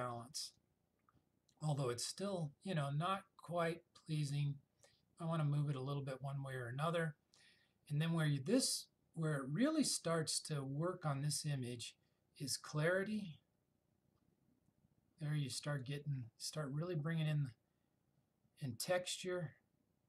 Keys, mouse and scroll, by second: 0.6-5.9 drag, 13.3-16.1 drag, 19.0-20.0 drag.